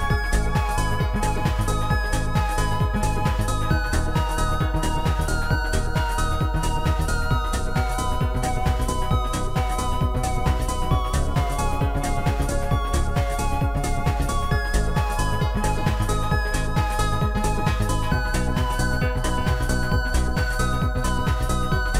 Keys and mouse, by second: 3.0 click, 8.2 click, 9.1 click, 10.6 click, 11.7 click, 17.6 shift+click, 17.6 right click, 18.6 shift+click, 19.4 click, 19.4 right click, 20.8 right click, 20.8 click.